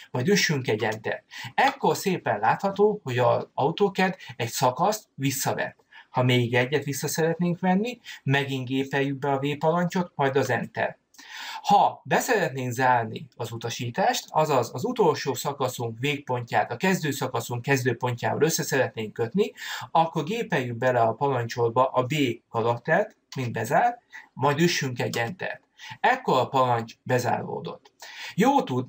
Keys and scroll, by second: 1.1 Return, 23.0 b, 25.0 Return.